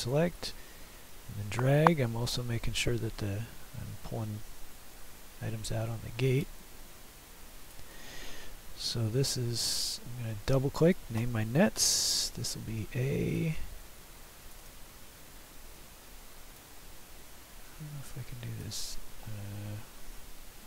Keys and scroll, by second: 5.8 Escape, 12.1 a.